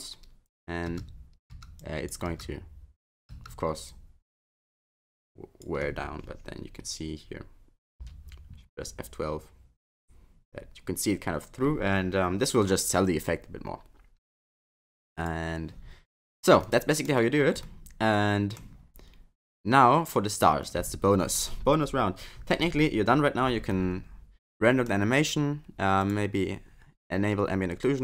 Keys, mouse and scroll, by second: 0.9 space, 1.5 space, 1.8 click, 2.3 space, 3.3 space, 3.9 click, 16.6 middle click, 17.2-17.6 scroll down 3, 17.6 middle click, 20.0 click, 23.6 scroll down 1, 23.8 middle click, 26.0 click.